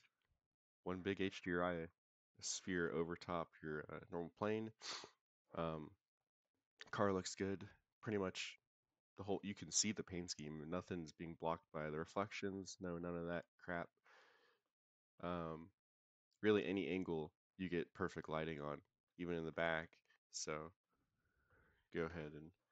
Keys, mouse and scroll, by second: 0.5 click, 1.2 middle click, 1.7-2.0 scroll up 3, 2.8 KP_0, 12.6-12.9 middle drag, 13.1-13.4 scroll up 2, 13.6 middle click, 14.5 middle click, 16.6-17.2 middle drag, 17.6 middle click, 18.5-19.0 scroll down 2, 19.0 middle click, 19.7 middle click, 20.7 middle click, 21.6 middle click, 21.7 middle click, 22.0 KP_0.